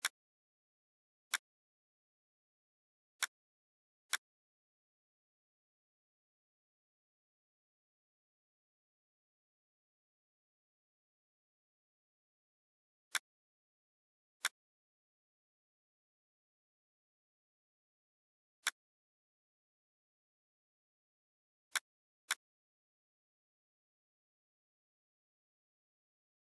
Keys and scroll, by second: 6.4 Right, 7.4 Down, 8.0 Left, 8.4 Down, 8.7 Left, 9.3 Down, 10.5 Left, 10.8 Down, 11.5 Left, 17.8 shift+Page_Up, 23.8-26.5 typing, 24.8 Caps_Lock.